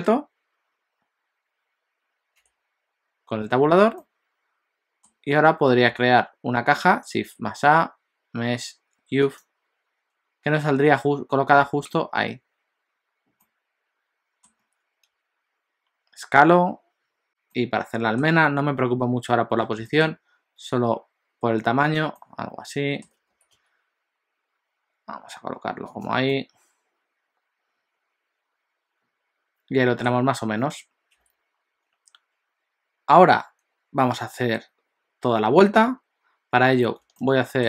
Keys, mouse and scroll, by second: 2.4 Tab, 4.0 middle click, 7.2 shift+a, 13.4 middle click, 15.1 s, 17.5 middle click, 19.8 s, 22.3 middle click, 23.4 g, 26.3 middle click, 31.2 KP_7, 37.2 shift+middle click.